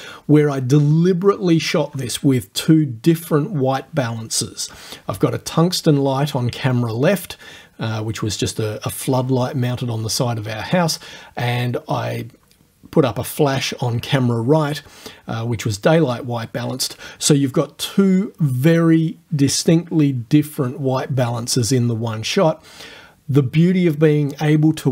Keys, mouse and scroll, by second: 4.0 click, 4.9 click, 5.6 click, 6.2 click, 6.8 click, 7.4 click, 8.7 click, 9.2 click, 9.7 click, 10.4 click, 11.0 click, 11.5 click, 11.7-12.4 scroll up 1, 12.4 click, 12.7-13.2 scroll up 1, 13.2 click, 13.4 right click, 13.7-15.4 middle drag, 16.0 click, 16.3-17.8 scroll up 1, 17.8 click, 18.0-22.0 scroll up 1, 22.6-24.9 drag.